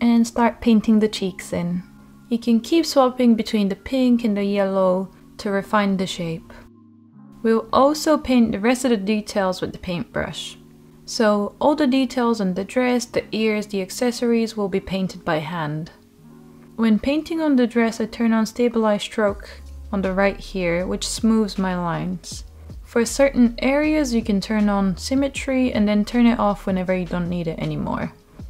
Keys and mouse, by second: 0.5 click, 0.8 ctrl+z, 0.8 click, 1.6 click, 2.0-3.2 drag, 3.4 click, 3.9 middle click, 4.4 middle click, 4.7 middle click, 5.0 shift+middle click, 5.8 click, 6.0 click, 6.2 click, 6.3 click, 6.5 click, 6.7 click, 7.0 ctrl+z, 7.8-11.3 drag, 11.4 ctrl+z, 11.9 click, 12.7 click, 12.9 click, 14.3 shift+middle click, 14.8 Tab, 15.1 Tab, 15.6 Tab, 15.9 shift+drag, 16.2 Tab, 16.8 Tab, 17.7 click, 18.2 shift+middle click, 18.2 click, 18.9 click, 19.4 ctrl+z, 19.5 click, 20.2 ctrl+z, 20.2 click, 20.9 click, 21.3 click, 21.7 click, 22.1 ctrl+z, 22.2 click, 22.7 ctrl+z, 22.8 click, 23.1 click, 23.8 ctrl+z, 23.8 click, 24.7 click, 25.0 alt+middle click, 25.3 click, 25.8 ctrl+z, 25.8 click, 26.5 alt+middle click, 27.9 click, 28.2 ctrl+z, 28.3 click.